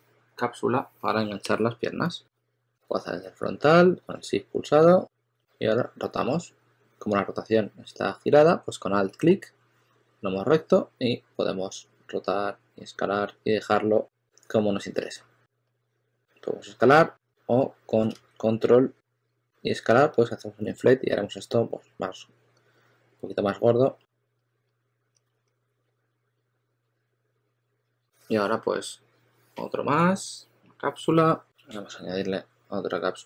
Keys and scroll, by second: 5.3 e, 14.6 w, 18.0 super+z, 21.0 w, 24.5-26.9 typing, 28.6-29.3 typing, 31.4 Down.